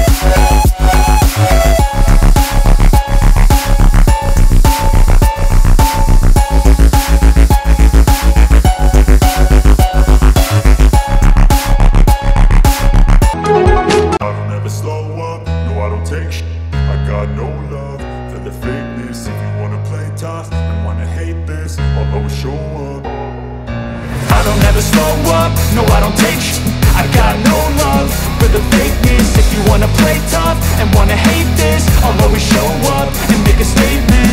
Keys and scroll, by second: 1.1 v, 6.3 Return, 7.3 super+], 9.8 super+t, 15.5 Return, 20.1-21.5 typing, 25.5 [, 28.7 space, 31.7 space.